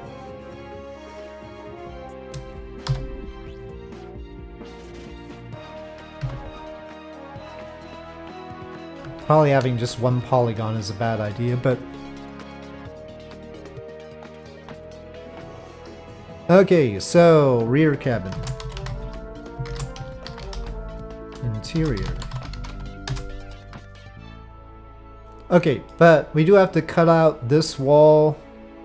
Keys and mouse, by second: 0.0 click, 0.0 f, 1.1 shift+click, 2.9 f, 4.7 middle click, 6.2 f, 6.9-8.3 middle drag, 9.2 shift+middle click, 10.4 middle click, 12.6-14.2 middle drag, 17.0-23.7 drag, 24.1 ctrl+p, 24.6-25.9 middle drag, 26.7 click, 27.4 click.